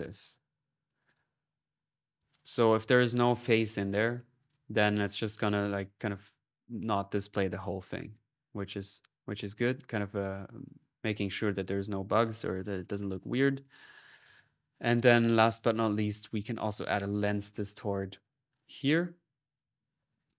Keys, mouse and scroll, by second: 0.6 middle click, 0.7 click, 2.0 click, 4.3 middle click, 7.7 middle click, 8.4 click, 9.2 click, 10.2-16.0 drag, 12.9-13.7 typing, 16.0 right click, 16.3 click, 17.0-17.7 typing, 18.1-20.3 drag.